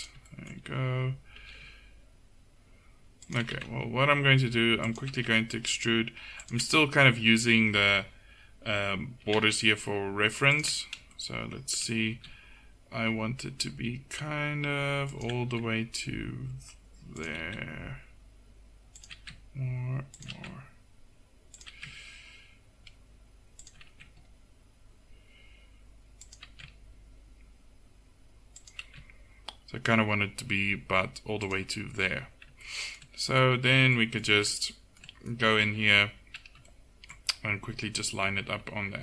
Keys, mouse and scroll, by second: 0.2 click, 1.4 e, 3.6 e, 5.2 e, 9.3 e, 12.2 e, 17.4 e, 19.2 e, 20.3 e, 21.7 e, 23.9 e, 26.5 e, 28.9 e, 37.9 a, 38.3 a, 38.6 a.